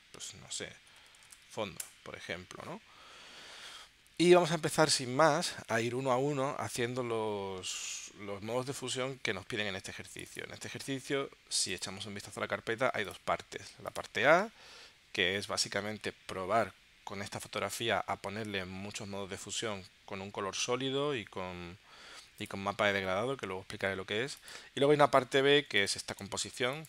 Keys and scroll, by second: 0.9-1.4 typing, 1.8 Return, 26.1 space.